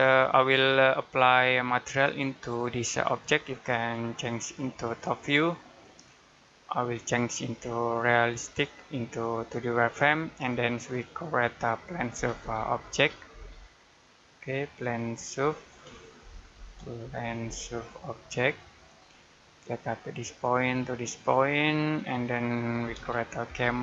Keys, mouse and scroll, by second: 4.2 click, 9.9-10.4 scroll down 1, 10.4 middle click, 12.0 p, 13.2 typing, 15.3 Escape, 16.1 typing, 18.7 click, 19.1 scroll down 1, 19.3 middle click, 20.4 click, 22.7-23.8 typing.